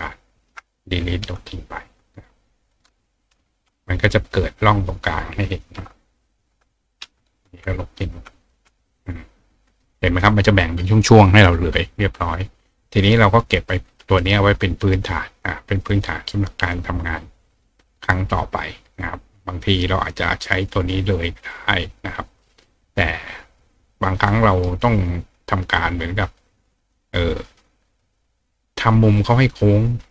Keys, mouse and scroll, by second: 2.2-2.7 alt+drag, 5.8-6.4 alt+drag, 7.8 click, 8.4 click, 9.7 click, 13.8 click, 14.2 right click, 14.8 right click, 15.9 click, 18.8 click, 19.8 click, 21.4-24.6 drag, 24.3 right click, 27.0-27.6 drag, 28.9 click, 29.9 click.